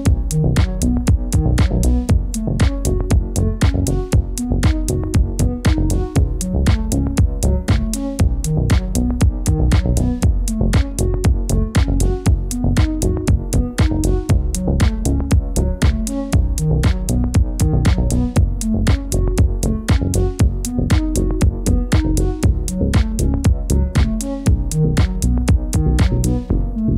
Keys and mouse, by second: 3.9-7.0 middle drag, 11.1-12.0 middle drag, 13.0-13.4 shift+middle drag, 13.8-14.3 shift+middle drag, 14.6-15.8 middle drag, 21.7 ctrl+s, 23.4 s.